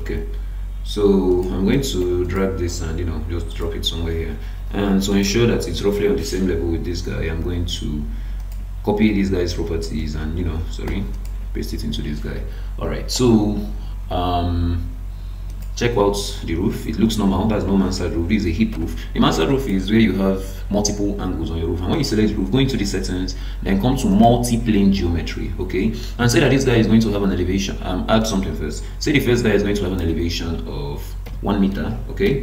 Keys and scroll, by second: 2.0 ctrl+d, 10.0 ctrl+space, 18.7 Escape.